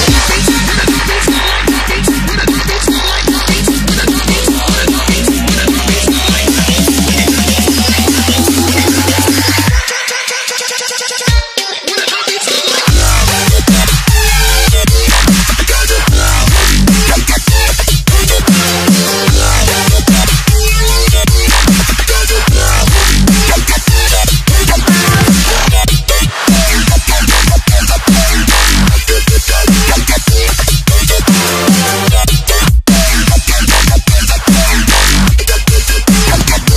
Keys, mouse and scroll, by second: 1.0 click, 7.2 Delete, 7.8 click, 13.7 ctrl+t, 14.9 click, 18.2 alt+click, 22.0 Return, 23.1 click, 27.1 click, 34.1-35.6 scroll down 1, 35.6 Delete, 36.3 click.